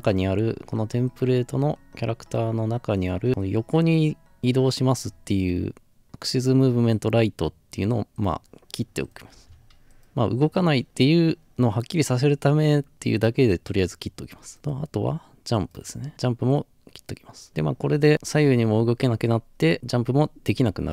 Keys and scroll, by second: 14.1 scroll down 2, 15.1-17.5 scroll up 4.